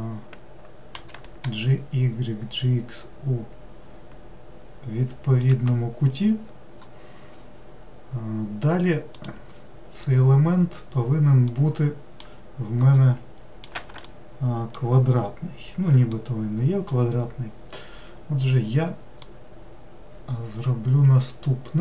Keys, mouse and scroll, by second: 1.0 g, 10.0-11.5 scroll up 2, 11.5-17.6 middle drag, 17.6 scroll down 1, 19.3-21.8 middle drag.